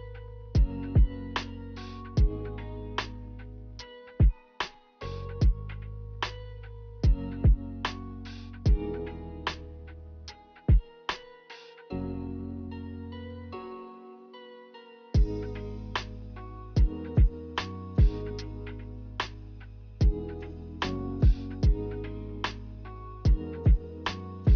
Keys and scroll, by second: 4.4 z, 11.2 k, 21.1 k.